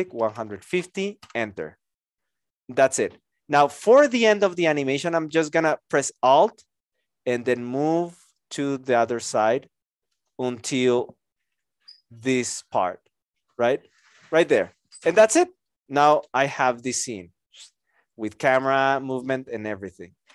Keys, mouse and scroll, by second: 0.0-0.3 typing, 1.2 Return.